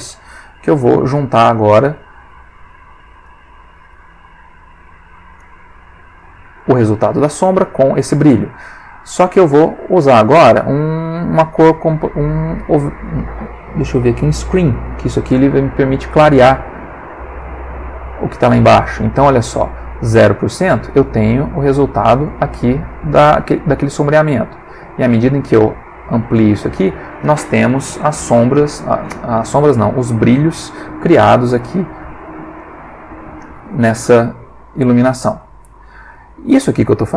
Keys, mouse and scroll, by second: 0.2 click, 1.6-2.7 drag, 3.2-4.0 drag, 4.4-5.2 drag, 5.4-6.3 drag, 6.6 click, 7.7 click, 9.0-14.9 drag, 16.7-17.2 drag, 17.4 click, 18.6 click, 20.6 click, 21.4 click, 23.1-23.7 drag, 23.7 middle click, 24.3-24.9 drag, 24.9 middle click, 25.2-25.8 drag, 25.8 middle click, 26.0-27.2 drag, 27.2-28.5 middle drag, 29.5 click, 32.6 click, 33.4 click, 34.0 middle click, 34.8 middle click, 35.5 ctrl+middle click, 36.3-37.1 ctrl+middle drag.